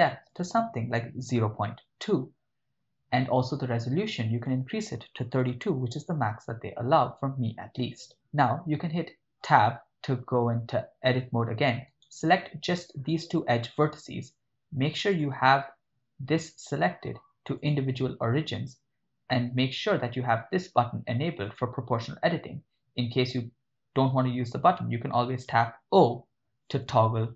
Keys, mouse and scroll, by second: 0.3-2.1 drag, 4.4-5.8 drag, 9.4 Tab, 12.0 right click, 13.2 shift+right click, 15.1-17.8 drag, 21.5 click, 26.9 o.